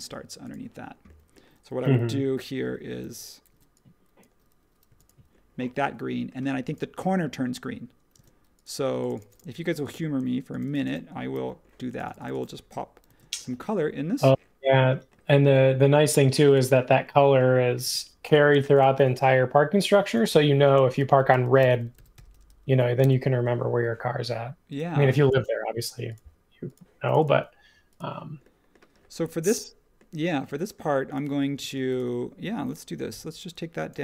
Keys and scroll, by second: 3.0-3.5 typing, 4.8 b, 8.1 space, 11.3 super+c, 13.0 shift+v, 17.8 space, 18.5 space, 20.7-21.6 typing, 23.0 Return, 23.0 typing, 31.6 space, 33.1 p.